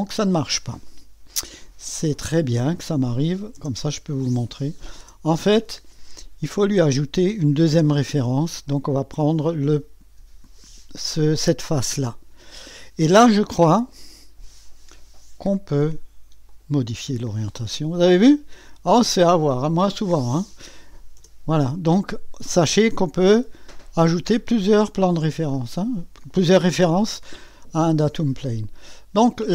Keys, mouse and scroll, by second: 2.7 click, 3.6 0, 4.5 click, 5.0 0, 7.5 click, 11.1 click, 13.9 click, 15.5 9, 15.8 0, 16.5 click, 18.6 click, 20.7-21.7 typing, 25.5-27.8 scroll down 1, 27.8-29.5 drag.